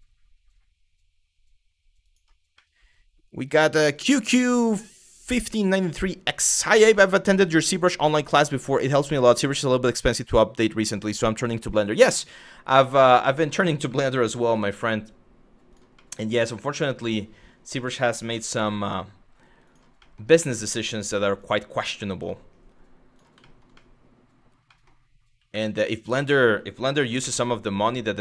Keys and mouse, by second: 1.7 click, 2.3 middle click, 11.8 middle click, 12.4 middle click, 13.6 middle click, 13.8 g, 14.1 y, 15.3 click, 15.7 middle click, 17.3 click, 18.0 g, 18.2 y, 19.3 click, 19.7 middle click, 21.0 click, 21.6 g, 22.8 click, 23.1 shift+middle click, 23.4 middle click, 24.3 middle click, 25.1 2, 26.6 g, 28.1 click.